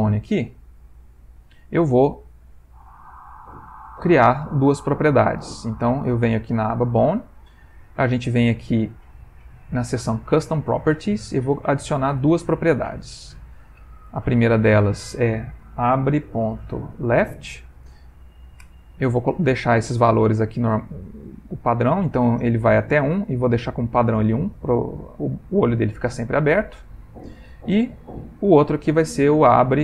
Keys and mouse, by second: 0.7 Tab, 1.4 middle click, 4.4 click, 9.1 click, 11.3 click, 12.2 click, 14.1 click, 28.8 click.